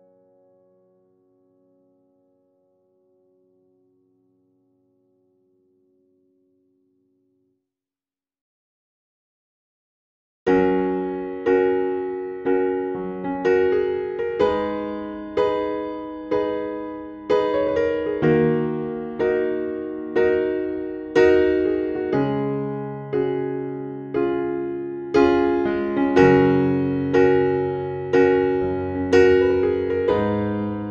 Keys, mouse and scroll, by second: 2.5 scroll down 1, 3.3 scroll up 1, 4.9-18.5 drag.